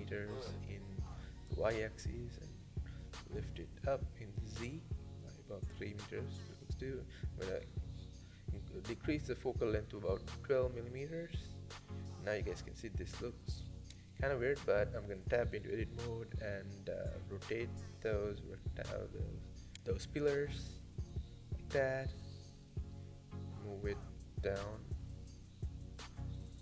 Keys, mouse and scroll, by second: 0.5-0.8 scroll down 1, 0.8-1.2 shift+middle drag, 1.2 g, 5.1 click, 5.6-7.4 drag, 7.4-7.9 scroll up 2, 7.9 g, 9.6-9.9 scroll down 1, 9.9-10.6 shift+middle drag, 10.6 click, 12.2 Tab, 13.3 r, 18.3 g, 18.8-20.1 drag, 20.1 g, 22.6 g, 25.9 middle click, 26.4-26.6 scroll down 5.